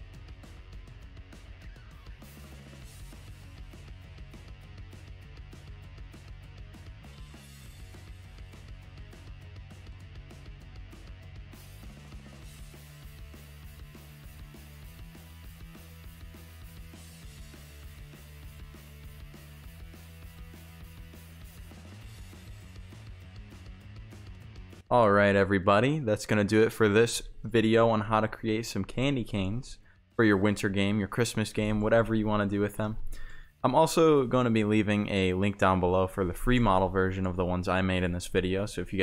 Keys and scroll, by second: 3.4 s, 4.2 w, 4.7 Delete, 4.8 a, 9.0 Pause, 9.5-12.0 typing, 13.3-23.6 typing.